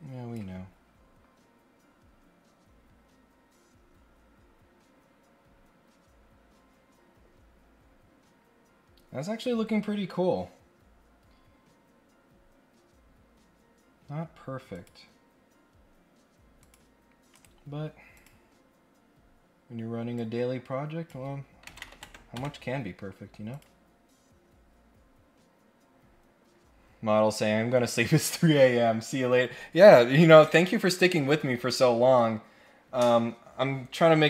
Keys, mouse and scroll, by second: 10.2-10.8 scroll up 2, 14.7 click, 16.6 click, 17.3 right click, 18.1 click, 20.1 click, 23.5 click.